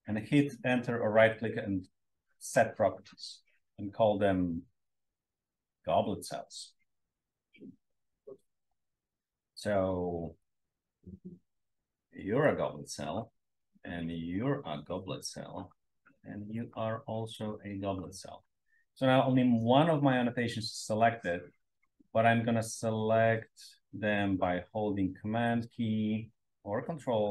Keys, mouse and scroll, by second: 8.9-9.3 drag, 9.5-10.2 drag, 10.4 click, 11.6 click, 12.4 click, 14.2 click, 15.0 click, 16.5 click, 17.3 click, 21.1-22.4 drag.